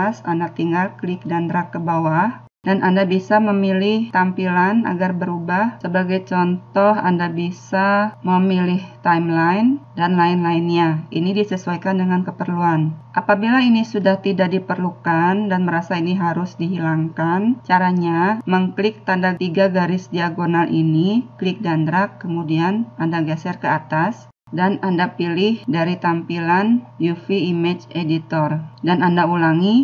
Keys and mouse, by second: 0.2 click, 2.2-4.1 drag, 24.5 click.